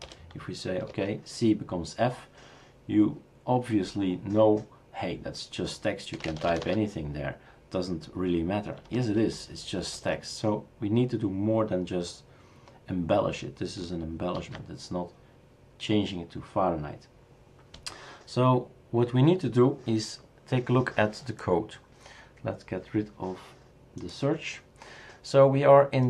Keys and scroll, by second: 0.0-1.2 typing, 6.1-7.4 typing, 8.7-10.0 typing, 14.3 ctrl+s.